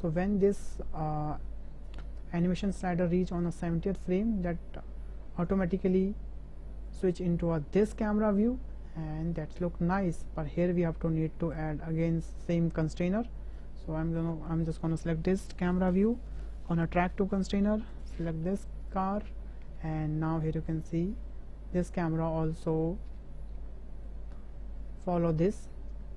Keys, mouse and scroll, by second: 0.3 space, 2.8 space, 4.1 space, 5.3 space, 6.1-6.9 drag, 7.0 space, 10.4 space, 11.6 click, 13.0 click, 14.3 click, 15.9-17.0 drag, 18.0 click, 20.7 drag, 21.1 space.